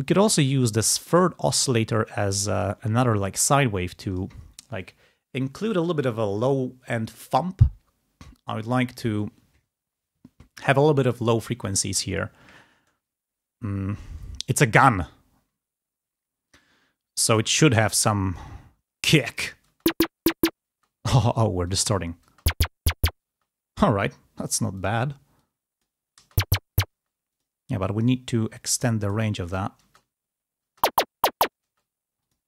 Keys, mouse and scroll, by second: 0.0 click, 1.1 click, 2.5 click, 4.0 click, 18.9 click, 19.5 space, 20.6 space, 21.7 click, 22.2 space, 23.4 space, 24.7 click, 25.3 click, 26.1 space, 27.3 click, 28.0 right click, 29.0 click, 29.8 space, 30.6 space, 31.7 space, 32.1 click.